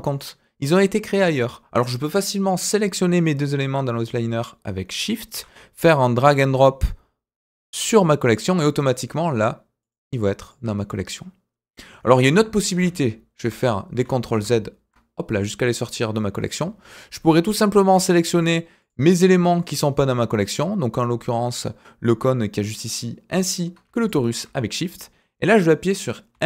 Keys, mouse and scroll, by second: 0.1 click, 2.5 click, 5.0 shift+click, 5.9 click, 8.9 click, 9.8 click, 10.4 click, 12.7 ctrl+z, 13.4 ctrl+z, 14.3 ctrl+z, 15.3 click, 18.3 click, 18.8 click, 19.6 click, 22.9 ctrl+click, 24.0 shift+click, 26.3 m.